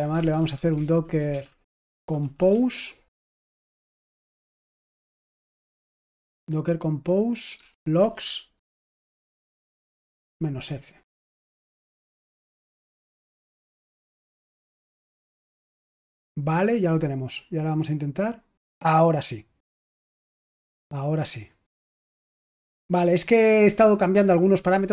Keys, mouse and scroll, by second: 0.0-6.0 typing, 7.5-10.6 typing, 12.7 Return, 17.8 click, 20.6 click, 21.9 click, 22.5 click.